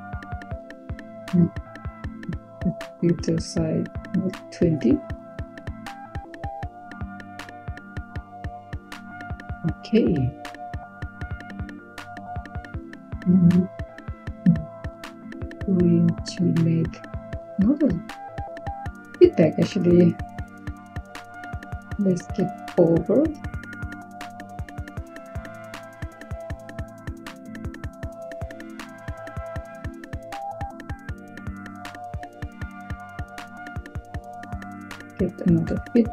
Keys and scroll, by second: 4.2 typing, 6.5-7.4 typing, 10.8-11.5 typing, 22.4-23.6 typing, 29.5 typing, 34.2 Tab, 35.0 f, 35.5 e.